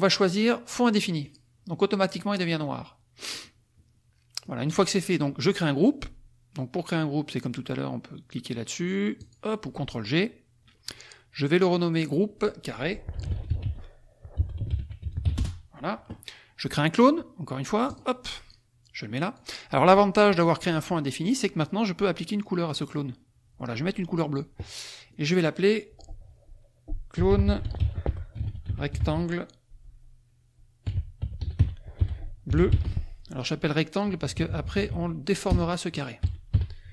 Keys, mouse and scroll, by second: 1.2 click, 3.2 click, 4.4 click, 9.2 click, 11.8 click, 12.9-15.8 typing, 17.9 click, 18.5-19.5 drag, 22.8 click, 25.2 click, 26.9-29.5 typing, 30.6-34.2 typing, 35.4 BackSpace, 36.4 Left, 36.5 g.